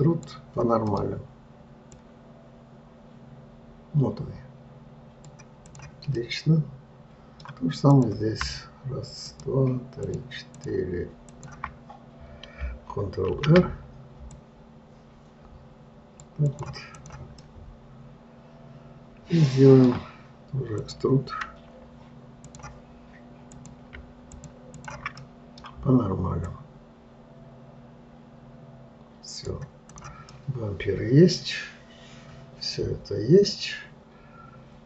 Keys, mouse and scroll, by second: 1.4-2.4 middle drag, 2.4 click, 6.1 click, 6.6-8.3 middle drag, 8.3 click, 9.7 shift+click, 10.4 shift+click, 11.0 shift+click, 11.7 shift+click, 13.7 ctrl+r, 17.4 click, 17.8-20.8 middle drag, 21.2 click, 22.8 click, 23.9 click, 24.7 shift+click, 25.1 shift+click, 25.7-26.8 middle drag, 26.8 click, 30.3 click, 30.7-33.8 middle drag.